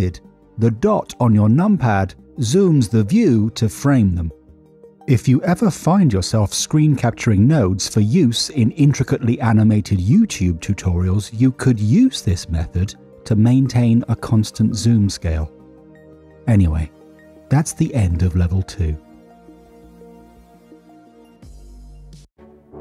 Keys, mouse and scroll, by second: 2.0 KP_Decimal, 15.7 middle click, 16.7 middle click, 19.5-22.3 drag.